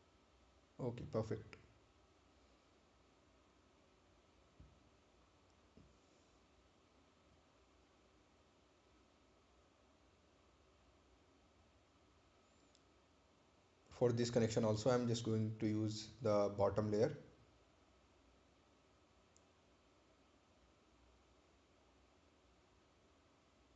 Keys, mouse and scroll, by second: 0.5 click, 3.4 click, 6.1 right click, 7.4 ctrl+click, 12.8 click, 19.8 click.